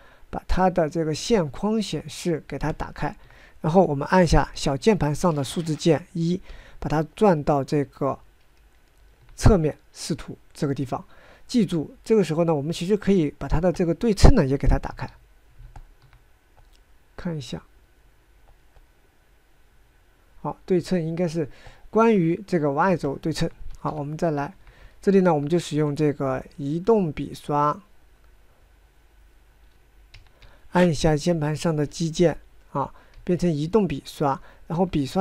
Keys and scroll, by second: 4.7 1, 15.1 /, 24.2 1, 26.0 g, 30.4 9, 33.5 g, 35.1 f.